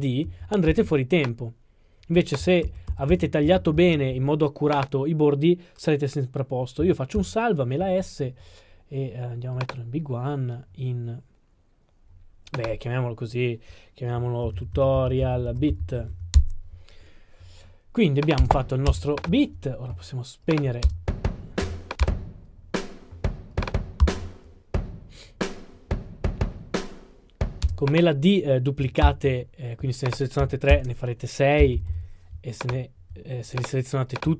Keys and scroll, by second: 2.6 super+z, 7.2 super+s, 14.4-15.5 typing, 16.4 Return, 24.0 super+d, 29.0 super+d.